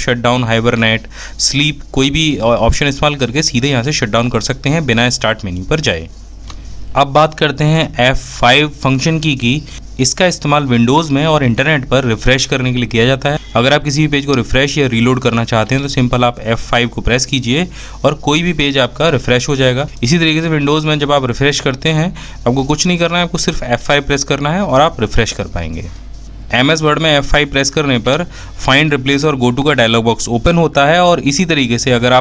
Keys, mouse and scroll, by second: 7.1 typing, 7.9 F5, 26.6 f, 32.1 F5.